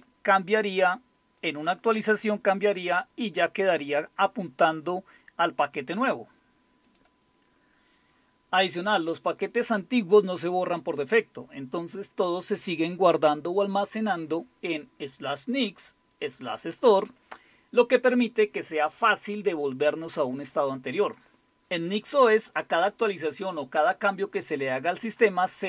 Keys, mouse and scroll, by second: 6.9 click, 7.4-7.9 scroll down 3.